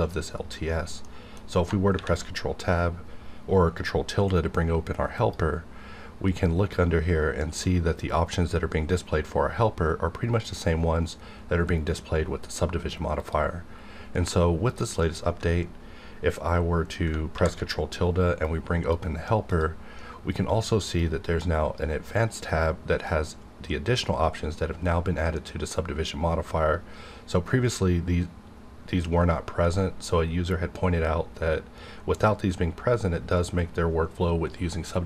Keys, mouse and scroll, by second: 1.2 middle click, 1.9 ctrl+`, 5.2 click, 13.2 click, 14.6 click, 17.3 ctrl+`, 18.4 click, 20.8 click.